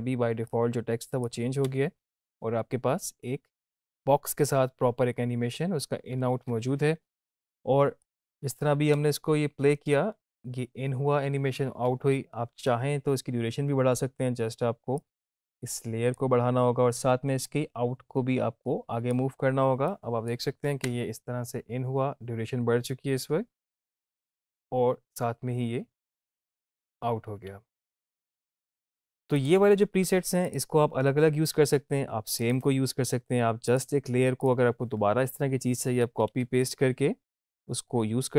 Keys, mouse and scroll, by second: 0.5-1.4 click, 1.6 space, 6.1 space, 7.1 =, 8.0-8.6 click, 8.9 space, 13.5 space, 15.3-16.2 drag, 16.9 ctrl+z, 17.7-19.3 drag, 20.2 click, 20.8 space, 28.4 space, 30.9 click.